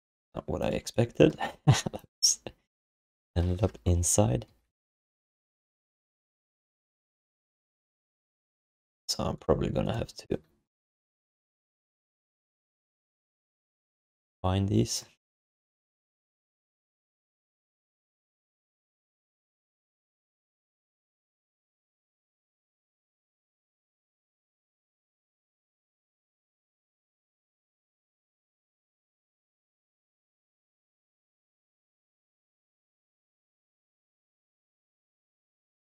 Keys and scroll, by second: 1.5 w, 4.5 f, 11.6 1, 15.7 alt+shift+d, 16.1 ctrl+s, 22.6 alt+shift+d, 22.9 ctrl+s, 31.7-33.7 typing.